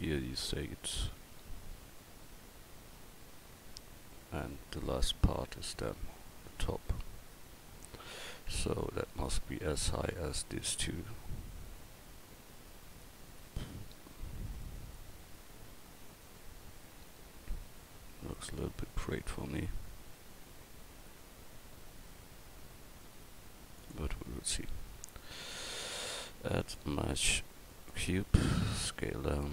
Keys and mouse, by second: 24.4 drag, 28.6 s.